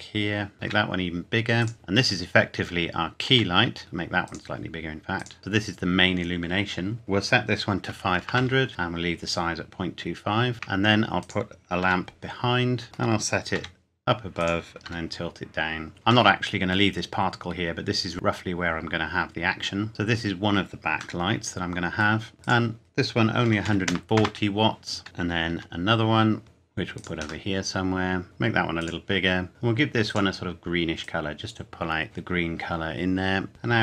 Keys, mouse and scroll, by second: 0.5 click, 0.6 s, 1.6 click, 1.7 middle click, 3.2 s, 4.2 click, 5.4 scroll down 1, 7.0 click, 7.9 KP_5, 8.2 KP_0, 8.7 KP_Enter, 10.5 shift+d, 11.2 click, 11.8 r, 12.8 middle click, 13.6 g, 14.4 click, 14.8 r, 15.9 click, 16.3 middle click, 19.2-19.6 scroll up 1, 19.6-19.9 scroll down 1, 19.9 click, 21.2 middle click, 22.4 click, 23.4 KP_1, 23.6 KP_4, 23.8 KP_0, 24.2 KP_Enter, 25.5 r, 26.4 f, 26.9 click, 27.4 middle click, 28.2 s, 28.8 click, 30.0 click.